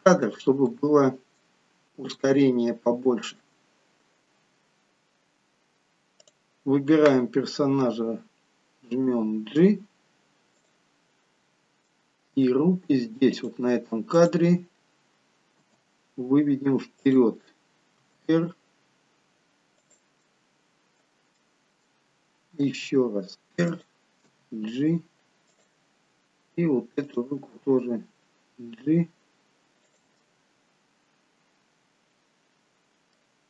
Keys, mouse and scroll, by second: 0.8 middle click, 1.8-2.2 scroll down 2, 2.3 shift+middle click, 6.3 click, 9.0 g, 11.3-12.0 scroll up 1, 12.0 middle click, 12.0 scroll up 2, 13.5 click, 14.3 click, 15.7 g, 18.1 r, 20.3 middle click, 21.6 middle click, 22.9 r, 24.4 g, 27.1 click, 30.1 g, 30.3 middle click.